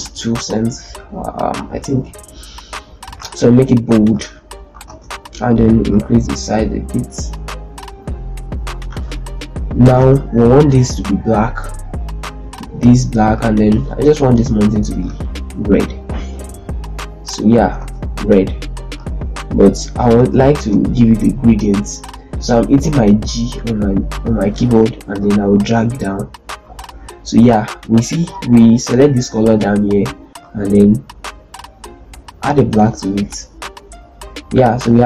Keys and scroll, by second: 3.1 z, 4.7 ctrl+space, 8.7 z, 9.8 ctrl+space, 13.9 g, 17.6 ctrl+space, 20.1 ctrl+space, 20.5 ctrl+space, 23.1 g.